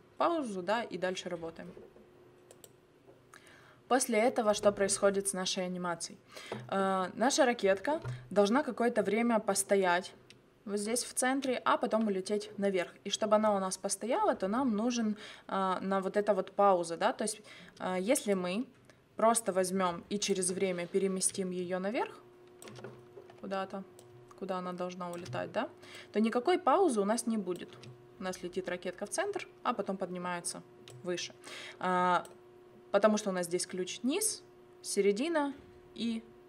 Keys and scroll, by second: 27.7 space.